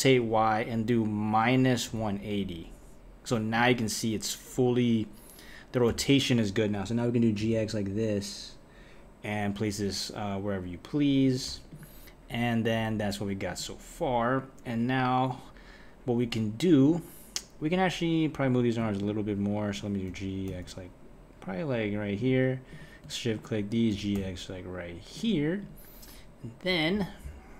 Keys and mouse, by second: 5.9 g, 11.7 click, 13.5 click, 18.4 click, 19.0 shift+click, 20.1 g, 22.7 click, 23.3 shift+click, 23.9 g, 25.6 click, 26.6 middle click, 26.7 KP_1.